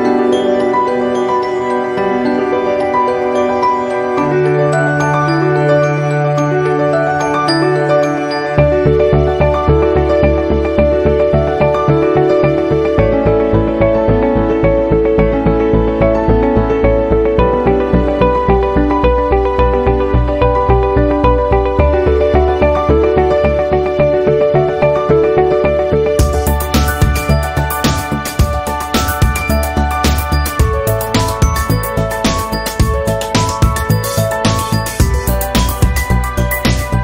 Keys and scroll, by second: 2.4 i, 3.3 v, 8.9 v, 10.4 i, 11.5 v, 12.8 i, 13.5 v, 15.2 p, 22.8 v, 26.3 a, 27.8 ctrl+z, 29.4 ctrl+z, 35.1 p.